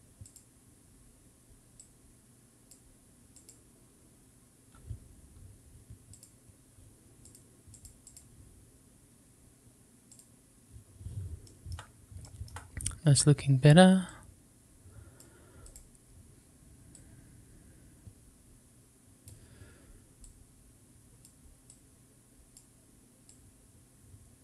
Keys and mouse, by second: 1.8 click, 3.3-6.1 drag, 7.3 click, 8.0-10.1 drag, 11.4 shift+middle drag, 14.0-15.7 drag, 17.0-19.3 drag, 20.2-21.2 drag, 21.7 click, 23.3-24.4 drag.